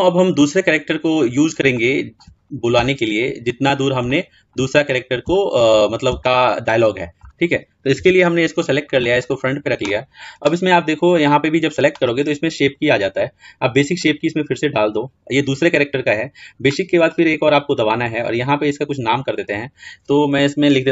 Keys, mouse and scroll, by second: 0.3-1.7 scroll down 7, 1.7-2.3 shift+middle drag, 2.3-2.7 scroll up 3, 2.7-4.6 shift+middle drag, 4.6-5.3 scroll up 3, 5.3-7.9 shift+middle drag, 7.9 KP_1, 9.1-11.6 drag, 13.8-16.3 drag, 17.0-20.9 drag.